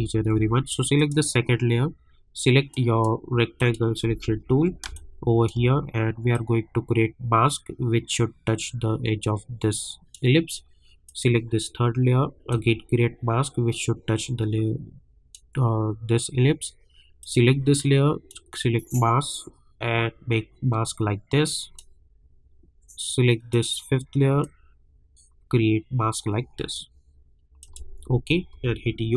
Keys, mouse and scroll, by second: 0.9 click, 2.7 click, 4.3-4.7 alt+scroll up 1, 4.8 space, 5.0 click, 5.3 space, 6.3-15.7 drag, 15.7-17.0 scroll down 1, 17.2-22.6 drag, 22.6 scroll down 1, 23.5-27.6 drag, 28.0 scroll up 1, 28.6-29.1 typing.